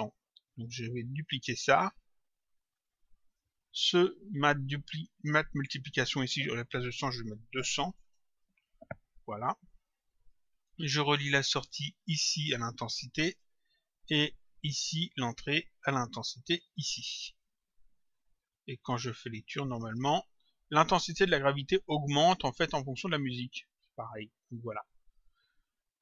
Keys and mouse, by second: 0.6 ctrl+click, 2.8 click, 4.8 click, 6.7 click, 8.3 click, 11.6 click, 14.9 click, 18.2 click, 19.7 click, 22.8 click.